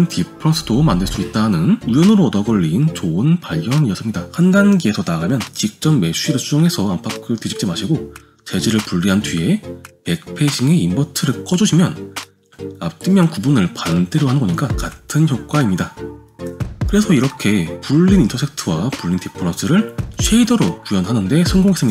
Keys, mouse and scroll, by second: 0.3-1.5 drag, 4.4 click, 4.5 g, 4.5 r, 4.5 click, 4.8 g, 6.7 click, 9.7 click, 10.8 click, 12.4 m, 14.7 click, 14.9 g, 17.8 g, 20.1 click, 20.4 g.